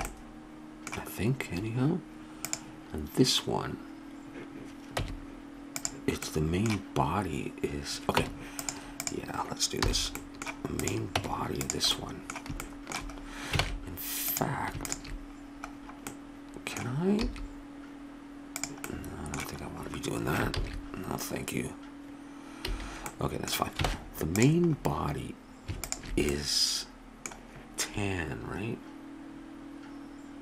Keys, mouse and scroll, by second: 4.9 Tab, 8.2 Tab, 9.8 h, 10.2-11.2 drag, 11.2 Tab, 13.6 ctrl+Tab, 17.2 e, 18.0 click, 20.5 ctrl+z, 22.6 a, 23.9 ctrl+Tab, 25.9-27.9 drag.